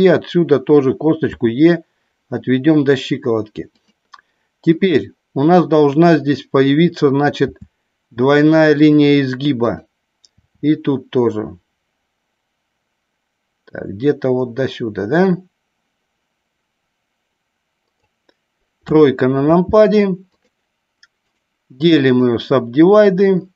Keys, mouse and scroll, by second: 3.7 click, 8.8 click, 9.7 click, 17.9 click, 18.8 KP_3, 20.4 click, 21.7-23.5 right drag.